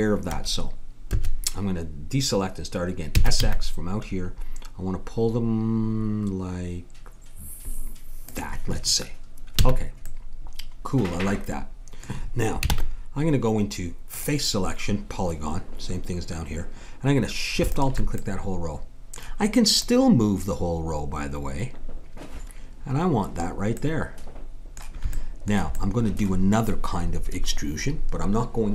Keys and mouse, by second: 3.1 s, 9.6 a, 12.7 ctrl+Tab, 17.7-18.7 drag, 18.7-20.2 middle drag, 20.2-21.6 drag, 23.8-28.7 middle drag.